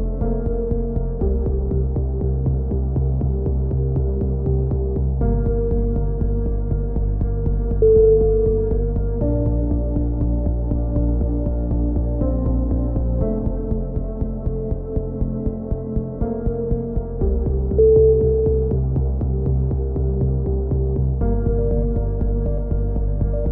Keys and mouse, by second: 0.0 KP_3, 0.4 z, 1.4 Tab, 2.1 b, 5.3 b, 6.3 click, 7.2 middle click, 8.1 click, 9.6 a, 9.9-11.1 middle drag, 12.0 c, 13.8 right click, 16.9 s, 17.5 ctrl+z, 18.0 a, 18.3 click, 19.5 b, 21.2 click, 22.7 a, 22.8 z, 23.2 Tab, 23.4 middle click.